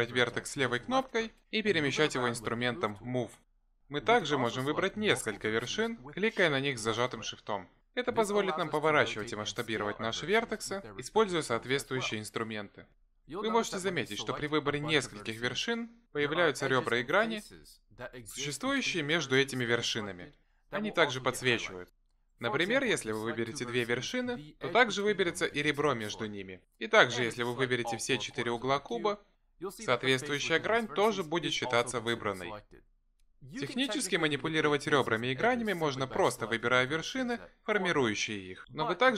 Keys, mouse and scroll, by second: 1.1 click, 3.2 g, 6.5 shift+click, 9.0 r, 10.5 s, 14.4 shift+click, 15.4 shift+click, 16.6 shift+click, 19.0 s, 20.0 r, 24.2 click, 25.0 shift+click, 26.7 r, 28.7 shift+click, 29.5 shift+click, 32.1 s, 35.7 shift+click, 36.2 shift+click, 37.2 g.